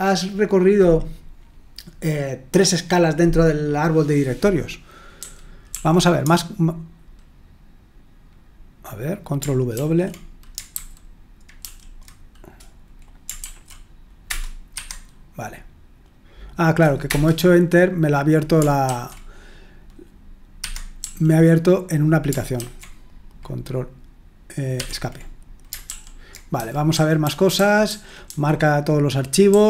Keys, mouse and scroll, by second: 5.2-5.7 typing, 9.8 ctrl+w, 10.7 super+h, 11.6 super+l, 13.4 ctrl+w, 14.3 Return, 14.8 Escape, 17.0 Return, 18.9 ctrl+w, 20.6 Escape, 21.0 l, 22.6 ctrl+w, 24.8 Escape, 25.9 super+l, 26.5-28.3 typing.